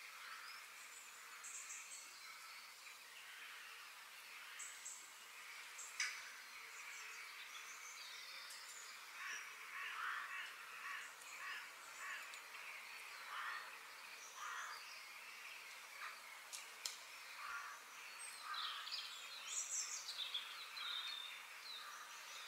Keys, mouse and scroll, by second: 0.1-2.0 middle drag, 2.8-3.8 middle drag, 3.8 f, 5.3 middle click, 5.9-6.4 scroll down 2, 6.4-8.3 shift+middle drag, 11.3-13.1 middle drag, 16.8-18.2 middle drag, 18.2 KP_3.